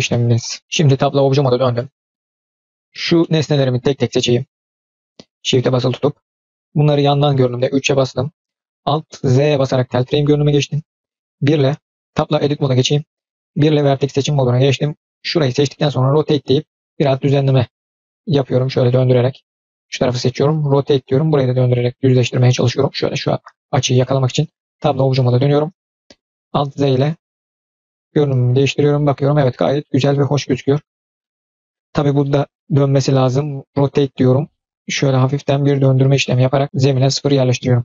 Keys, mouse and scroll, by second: 0.0-0.7 middle drag, 0.6 scroll down 2, 0.8 Tab, 1.1-1.7 scroll up 1, 1.7 middle click, 3.1-3.5 middle drag, 4.9 shift+drag, 5.2 shift+click, 5.8 shift+click, 6.2-6.9 middle drag, 7.4 KP_3, 9.3 alt+z, 11.6 1, 12.3 Tab, 13.4 1, 14.1-15.3 drag, 16.0 r, 19.7 click, 24.5 Tab, 24.8 click, 25.1-25.5 middle drag, 25.5-25.9 scroll down 2, 25.9 middle click, 26.5 alt+z, 26.9 click, 27.2-30.9 middle drag, 31.0-31.5 scroll up 3, 31.1-31.9 middle drag, 32.1-32.5 drag, 32.5 middle drag, 32.9 drag, 33.1-33.6 middle drag, 33.9 r, 35.7-36.6 middle drag, 37.1-37.8 middle drag.